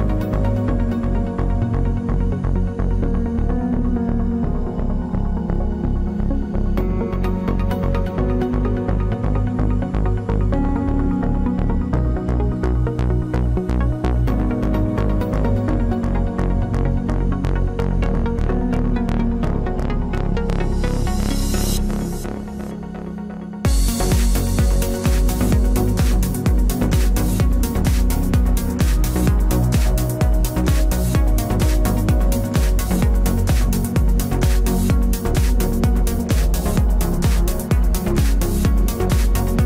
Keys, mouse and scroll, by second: 1.1 middle click, 1.6-4.8 right drag, 2.5 c, 3.5-5.3 drag, 5.4-6.7 middle drag, 7.7 ctrl+s, 11.1 right click, 11.5 KP_Decimal, 12.8 g, 15.6-17.9 drag, 18.4-20.1 right drag, 18.5 g, 22.6-24.2 right drag, 24.2 ctrl+r, 25.7 KP_Decimal, 27.7 g, 28.9-31.1 right drag, 29.4 g, 33.8 g, 35.7-37.5 right drag, 35.8 g, 37.7 ctrl+s, 38.2 click.